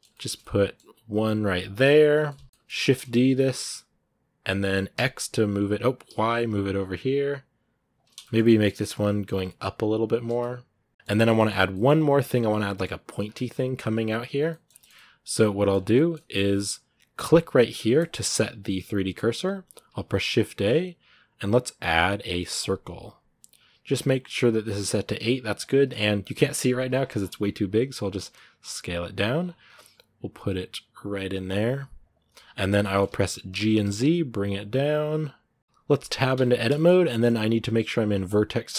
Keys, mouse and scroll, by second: 0.8 g, 1.6 middle click, 2.1 g, 2.4 middle click, 2.7 shift+d, 8.0 shift+middle click, 8.8 g, 10.2-11.3 middle drag, 11.3 scroll up 2, 11.5 middle click, 12.3 scroll down 2, 12.5 middle click, 13.0-14.3 scroll down 2, 13.1 shift+middle click, 14.3-15.5 middle drag, 15.5 scroll up 3, 15.7-17.8 middle drag, 17.8 click, 18.5-22.5 middle drag, 22.5 shift+a, 26.6-27.0 scroll down 10, 27.4 scroll up 2, 28.0 s, 29.2-29.5 scroll up 10, 29.7 s, 32.1 middle click, 32.4 scroll up 1, 32.6 shift+middle click, 33.3 g, 35.6-36.1 scroll down 4, 36.1 Tab, 36.5 shift+middle click, 36.7 scroll up 1, 36.9-38.1 middle drag, 38.1 click.